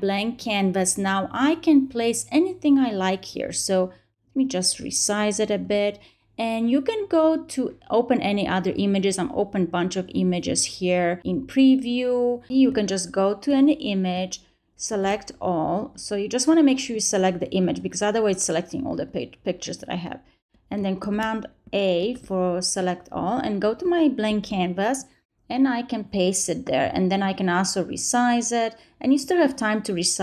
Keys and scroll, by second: 14.8 super+a, 20.9 super+a, 21.9 super+c, 24.1 super+v.